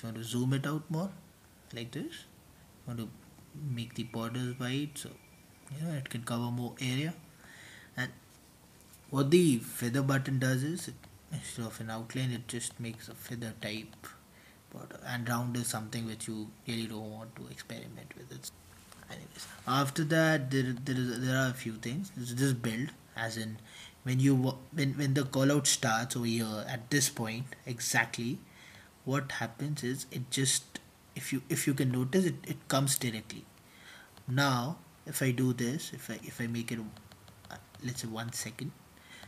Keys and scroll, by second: 25.4 Return, 27.4 super+t, 29.1 Return, 29.6 super+t, 30.0-34.9 typing.